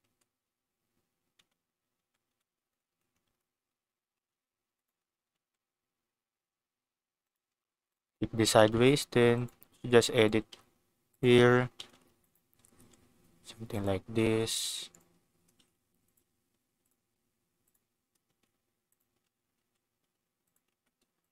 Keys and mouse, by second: 1.3 Tab, 2.0 Tab, 2.2 Tab, 3.2 shift+d, 4.7 click, 5.2 r, 5.3 z, 7.2 click, 7.4 g, 7.8 click, 8.6 shift+d, 9.3 click, 9.5 s, 10.1 click, 10.5 g, 11.1 click, 11.7 shift+d, 12.2 click, 12.3 r, 12.7 z, 13.7 click, 14.1 g, 14.9 click, 15.5 shift+d, 16.0 click, 16.1 s, 16.8 click, 17.0 g, 17.6 click, 18.2 shift+d, 18.8 click, 19.0 r, 19.5 z, 20.4 click, 20.7 Tab, 21.2 click.